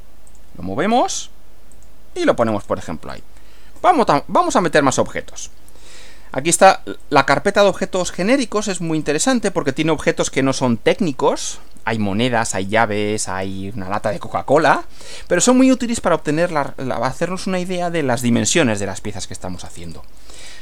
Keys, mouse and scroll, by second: 0.3 click, 1.7 click, 2.4-2.8 scroll down 1, 3.1 click, 4.6 click, 5.9 click, 7.1 click, 8.9 click, 13.1 scroll down 1, 14.1 scroll down 2, 14.5-14.9 scroll up 2, 18.5 scroll down 2, 19.5-20.1 scroll up 2, 20.3-20.6 scroll up 2.